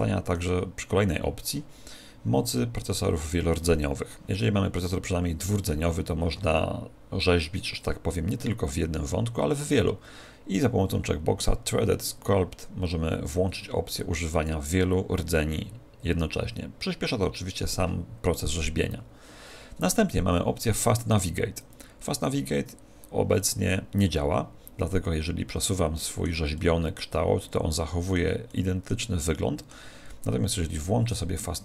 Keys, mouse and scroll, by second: 23.3-28.3 middle drag, 28.5-31.0 middle drag, 31.1 click.